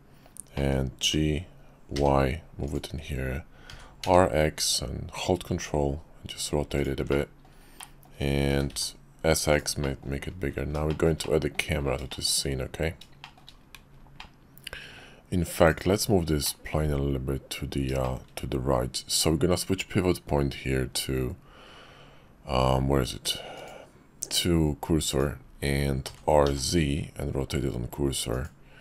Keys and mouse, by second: 0.7 click, 1.0 g, 3.6 r, 7.2 drag, 7.9 click, 8.5 s, 9.9 click, 11.0 shift+middle click, 11.3 click, 11.5 middle drag, 12.0-12.4 shift+middle drag, 13.1-13.5 shift+middle drag, 14.1-15.0 middle drag, 15.7 click, 16.4-16.7 middle drag, 18.0 shift+middle click, 18.1 shift+click, 23.6-25.2 drag, 26.0 r, 26.5 middle click.